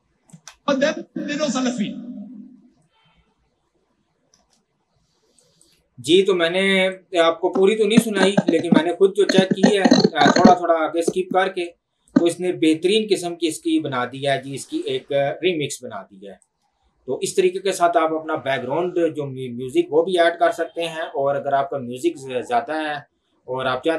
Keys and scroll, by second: 0.6 space, 4.7 space.